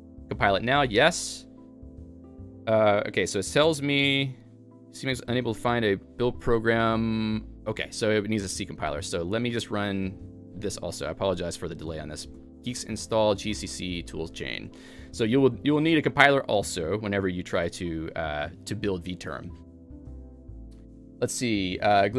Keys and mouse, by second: 0.7-4.1 typing, 6.4-7.1 typing, 9.2-9.9 typing.